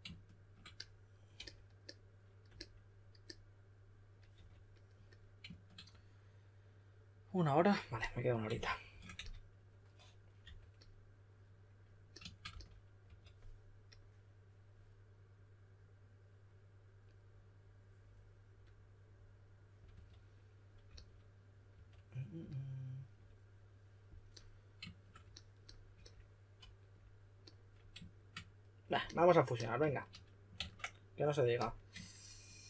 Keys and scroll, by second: 4.3 4, 8.3-10.9 typing, 12.4-13.5 typing, 19.9-21.7 typing, 30.5 super+a.